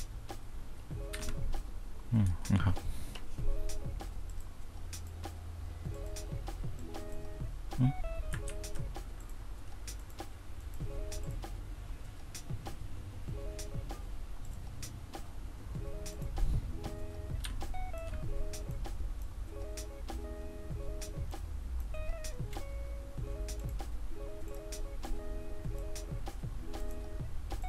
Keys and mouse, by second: 1.3 F1, 2.4 F2, 8.6 ctrl+z, 17.6 1, 26.9 click.